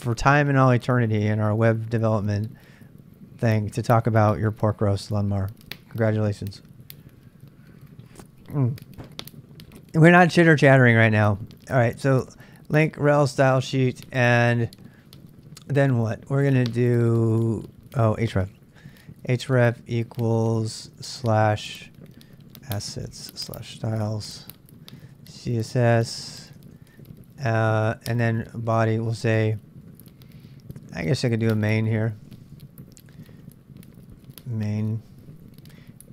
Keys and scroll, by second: 18.6-18.9 typing, 20.8-36.1 typing.